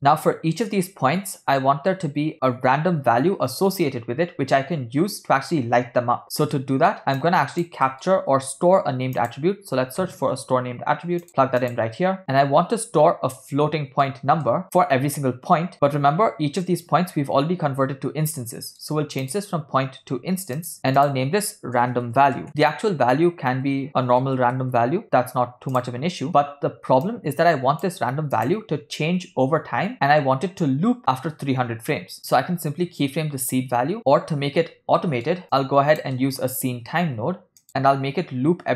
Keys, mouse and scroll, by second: 6.2 ctrl+middle click, 7.3 click, 7.9 middle click, 8.4 shift+a, 13.6 ctrl+middle click, 14.5 middle click, 16.6 middle click, 18.7 middle click, 19.4-20.8 drag, 20.8 middle click, 21.0-22.5 drag, 23.0 middle drag, 23.6 shift+a, 27.2-28.2 drag, 28.4 click, 35.0 ctrl+middle click, 35.7 click, 36.3 middle click, 36.8 shift+a.